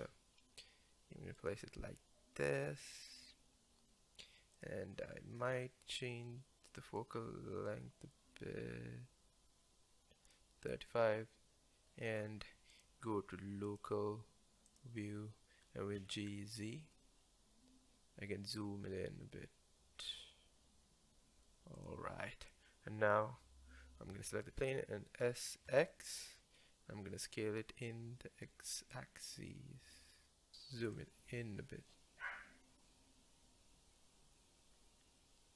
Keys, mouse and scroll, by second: 0.0 g, 4.6 click, 5.4 scroll up 5, 7.0-10.5 drag, 12.7-14.8 drag, 16.0 g, 22.4 click, 25.2 s, 30.5 click, 30.9-35.5 drag.